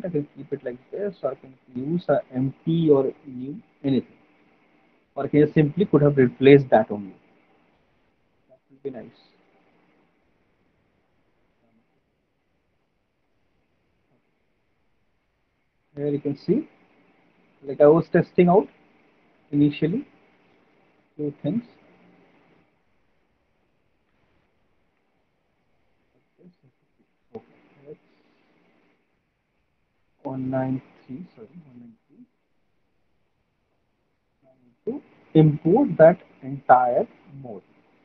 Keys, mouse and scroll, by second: 0.3 click, 3.4 click, 6.3 click, 11.5 click, 13.1 click, 14.2 alt+click, 14.8 alt+right click, 17.4 alt+middle click, 20.9 Delete, 21.6 click, 22.0 Delete, 22.6 Delete, 22.6 click, 23.5 click, 23.6 Delete, 23.8 click, 24.2 Delete, 24.8 click, 25.2 Delete, 26.7 alt+right click, 29.3 click, 30.2 click, 31.5 click, 35.8 click.